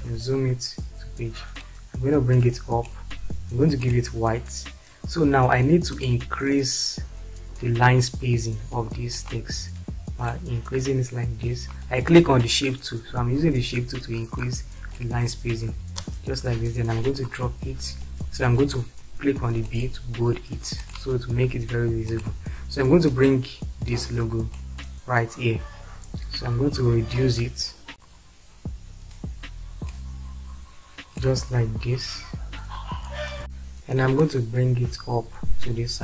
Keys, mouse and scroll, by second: 0.1 shift+F4, 1.7-9.1 drag, 16.1 space.